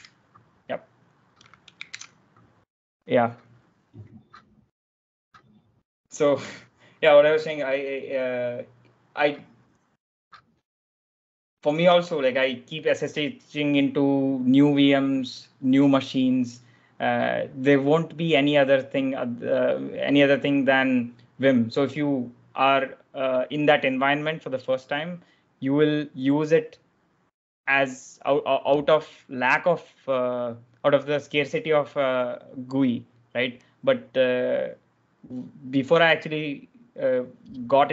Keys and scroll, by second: 1.8 super+Tab, 2.2 shift+;.